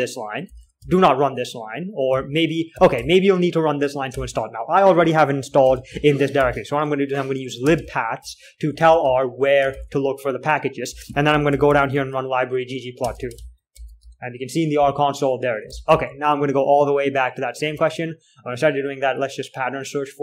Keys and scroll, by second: 0.7-1.4 typing, 2.5-4.4 typing, 5.5-9.5 typing, 9.2 ctrl+l, 10.0 ctrl+h, 11.1-14.8 typing, 16.0 ctrl+h, 16.2 j, 16.4-18.8 j.